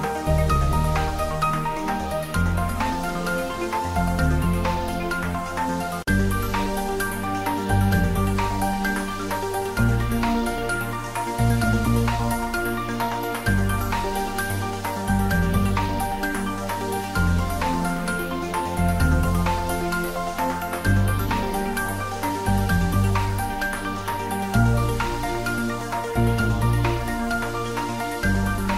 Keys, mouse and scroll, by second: 1.5 click, 2.4 Tab, 3.4 click, 4.5 Tab, 7.7 click, 8.1-9.3 middle drag, 9.3 Tab, 9.7 middle click, 9.8 Tab, 10.4 ctrl+3, 10.9 middle click, 11.2 click, 11.7 ctrl+3, 12.2-13.8 middle drag, 14.2 Tab, 16.6 click, 16.9 Tab, 18.5 click, 19.1-23.0 middle drag, 23.0 Tab, 24.0 ctrl+r, 24.9 click, 25.7 Tab, 26.6 ctrl+r, 27.7 click, 28.5 Tab.